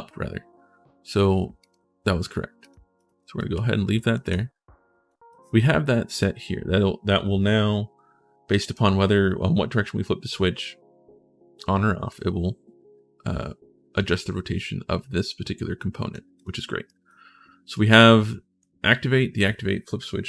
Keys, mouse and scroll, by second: 1.4 click, 2.4 click, 2.7 right click, 3.1-4.5 typing, 3.1-4.6 right drag, 4.9 right click, 8.3 click, 15.0 click, 16.2 click, 16.6 right click, 17.0 scroll up 1, 17.5 right click.